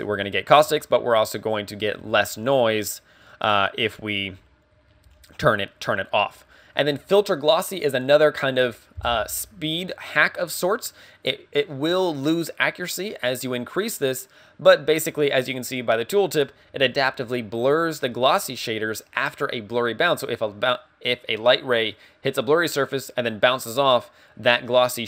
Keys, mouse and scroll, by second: 5.5 click.